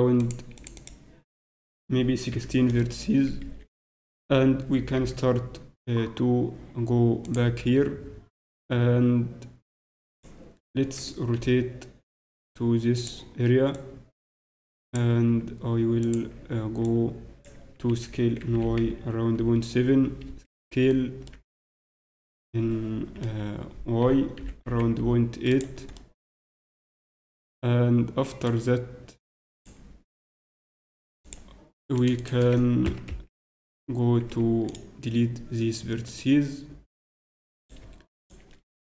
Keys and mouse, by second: 0.7-2.6 drag, 4.9 z, 4.9 g, 5.9 click, 7.6 s, 12.2 r, 13.7-15.5 drag, 15.4 s, 16.8-18.6 drag, 18.5 s, 21.2-23.9 middle drag, 24.0 s, 27.1 z, 28.4-30.3 drag, 30.1 Tab, 31.2-33.7 drag, 31.8-34.0 right drag, 32.8 ctrl+KP_Add, 34.3 x, 36.1 click, 37.6-38.8 right drag.